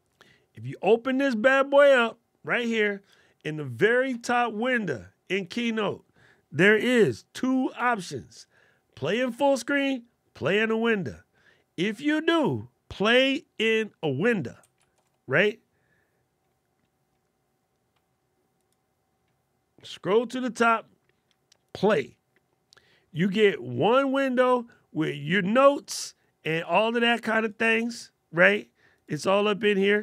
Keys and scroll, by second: 7.5 alt+super+8.